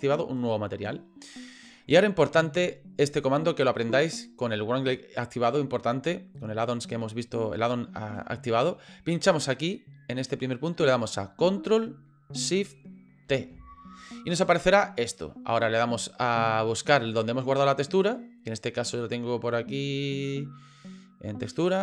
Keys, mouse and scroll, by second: 9.4 click, 13.3 ctrl+shift+t.